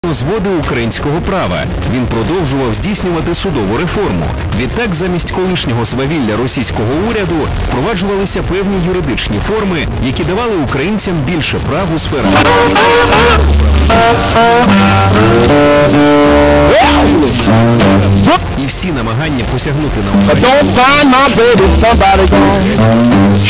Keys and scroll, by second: 0.1 ctrl+q, 2.6 c, 3.7 Up, 4.1 Up, 4.9 Up, 4.9 Return, 18.3 Page_Down.